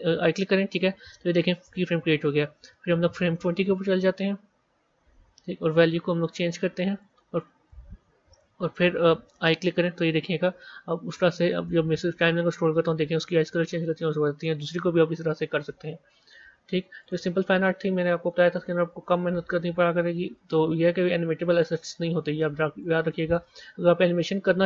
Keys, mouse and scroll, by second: 17.0 z, 19.0-24.6 drag.